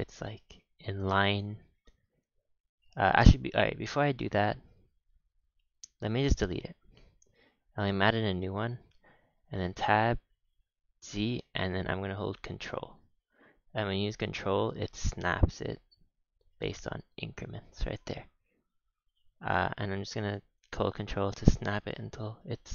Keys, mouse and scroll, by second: 0.0 g, 1.9-2.8 scroll down 3, 2.8 ctrl+z, 3.2 ctrl+z, 3.5 ctrl+z, 3.8 ctrl+z, 4.1 ctrl+z, 4.4 ctrl+z, 4.7 ctrl+z, 5.1 ctrl+z, 5.5 Tab, 5.9 x, 6.4 shift+a, 8.9 Tab, 9.3 g, 18.4-19.7 drag, 19.7 g, 21.6 scroll up 5, 21.9 shift+middle click, 22.5-22.7 scroll up 3.